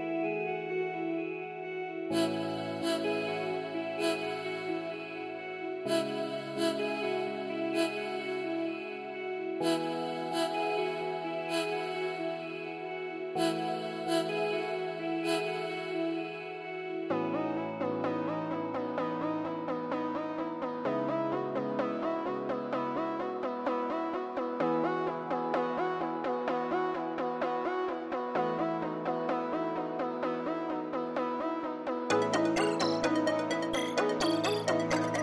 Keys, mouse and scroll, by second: 0.0-0.3 scroll down 1, 31.8-33.0 scroll down 1, 33.2 middle click, 34.5-35.0 scroll up 1.